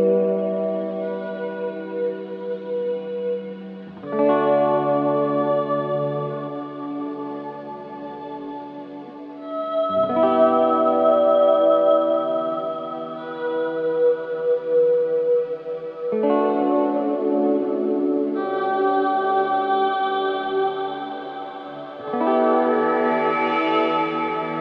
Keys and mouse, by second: 0.8-3.0 drag, 3.5 alt+click, 3.9 ctrl+alt+click, 4.3 ctrl+alt+click, 5.4-15.6 drag, 11.0 typing, 18.0 click, 19.1-19.7 typing, 19.9 Return, 20.8-24.6 typing, 21.9 click, 23.2 click.